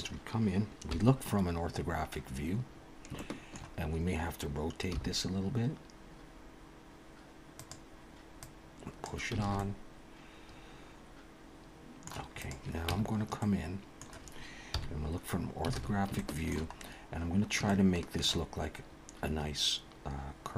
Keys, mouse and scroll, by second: 0.9 KP_1, 2.7-3.1 scroll up 1, 3.2 shift+middle click, 4.9 r, 8.4 click, 9.4 alt+a, 9.6 middle click, 12.3 click, 12.9 Tab, 13.4 middle click, 14.7 KP_1, 15.7 alt+a, 16.2 shift+middle click, 16.8-17.6 scroll up 3, 17.7 shift+middle click.